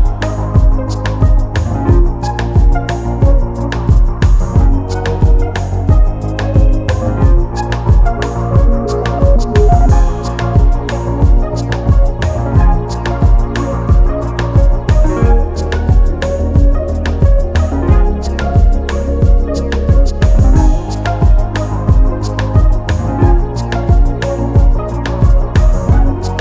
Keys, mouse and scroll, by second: 2.0 click, 4.4 ctrl+d, 5.2 ctrl+d, 6.1 click, 6.4 scroll up 1, 7.6 click, 10.9 scroll down 1, 11.7 click, 12.0 scroll up 1, 12.4 click, 14.2 scroll up 1, 14.7 click, 16.5 scroll down 1, 17.5 click, 22.6 scroll down 1, 23.5 click, 25.5-25.8 scroll down 1, 26.2 click.